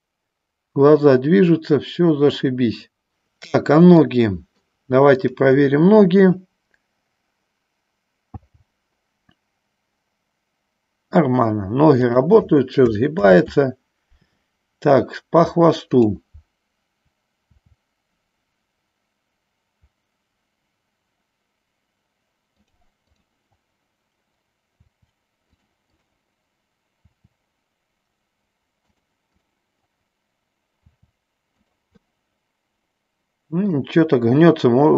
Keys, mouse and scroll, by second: 4.3 middle click, 5.3-8.0 drag, 8.6 g, 13.6 ctrl+z, 17.8 r, 22.9 click, 23.4-24.6 drag, 25.0 r, 26.1 click, 27.2 r, 29.5 click, 31.1 r, 31.9 click, 32.2-33.9 middle drag.